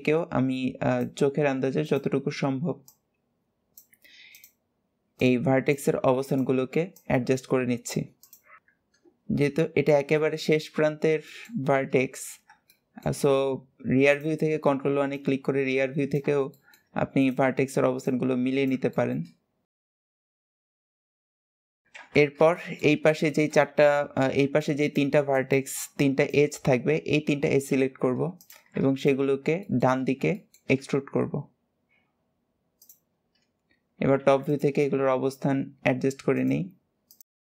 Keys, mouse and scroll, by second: 1.0 scroll up 2, 1.6 click, 2.7 click, 4.1 click, 5.0 click, 6.0 click, 6.7 click, 8.0 click, 8.6 ctrl+KP_1, 9.0 middle click, 9.0-9.9 scroll down 6, 9.9-12.1 shift+middle drag, 12.1-12.5 scroll up 1, 12.5 shift+middle click, 13.2-13.9 scroll up 1, 13.9 click, 14.9 click, 16.3 shift+middle click, 16.9 click, 17.8 click, 18.7 shift+middle click, 19.1-19.5 scroll up 2, 19.7 click, 19.8 shift+middle click, 20.2 click, 20.6 shift+middle click, 21.1 click, 21.4 KP_7, 21.7-22.2 scroll down 9, 21.8 alt+z, 22.3-27.5 shift+middle drag, 28.1 click, 28.8 alt+shift+click, 29.3 shift+middle click, 29.9 scroll up 1, 30.1 shift+middle click, 30.5 e, 33.2-33.9 scroll up 1, 33.9 alt+z, 34.3 click, 34.7 g, 36.9 click, 37.1 g.